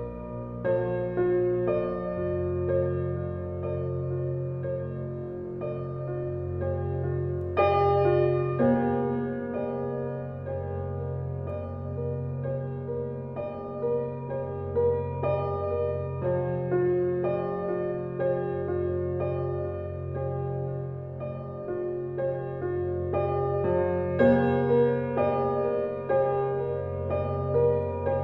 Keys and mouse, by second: 0.9-1.7 drag, 1.8 click, 2.5 click, 3.4 alt+click, 4.2 alt+click, 5.5-6.6 alt+drag, 7.0-8.5 ctrl+alt+drag, 8.8-10.8 alt+drag, 11.5 alt+click, 11.6-12.4 typing, 12.5-14.1 ctrl+alt+drag, 14.8 click, 16.9-22.7 ctrl+alt+drag, 19.7-20.4 typing, 22.2 typing, 23.4-23.8 typing, 26.6-28.2 drag.